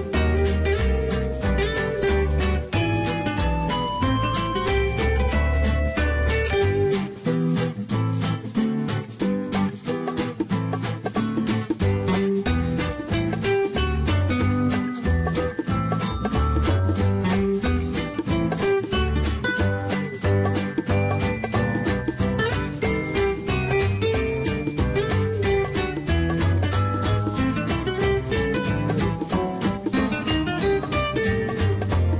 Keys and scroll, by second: 2.5 Escape, 7.6-8.5 typing.